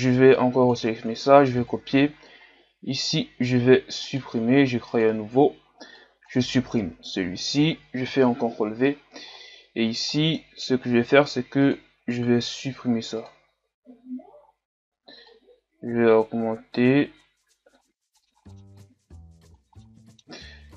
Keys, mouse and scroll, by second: 0.4-0.8 scroll down 2, 2.2-3.0 scroll up 5, 3.0-4.2 right drag, 4.2-7.1 drag, 7.1 Delete, 8.5 ctrl+v, 10.8 middle click, 11.7-17.7 drag, 18.0 click, 18.2 middle click, 18.2 scroll up 1, 18.3 scroll down 2, 18.4 scroll up 2, 18.4 middle click, 18.7 click, 19.5 a, 19.6 scroll down 2, 19.9 middle click, 20.1-20.7 scroll up 4.